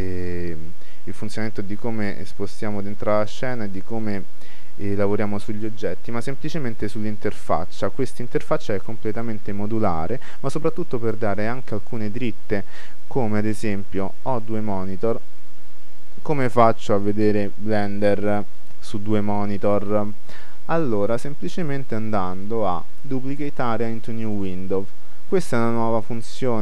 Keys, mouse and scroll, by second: 1.8 shift+c, 2.0-4.1 middle drag, 5.3 middle click, 21.7-23.5 drag.